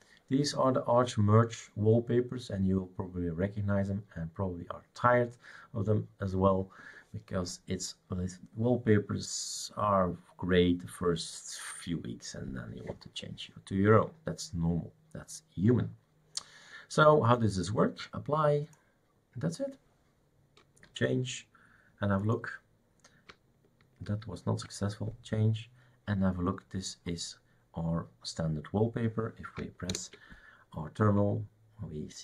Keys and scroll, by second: 20.9 super+(, 24.1 super+', 29.9 super+Return.